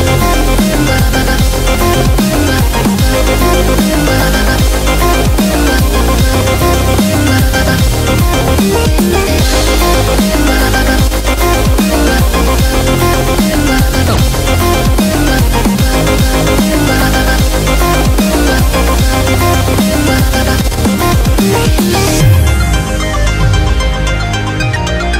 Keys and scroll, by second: 9.7 super+-.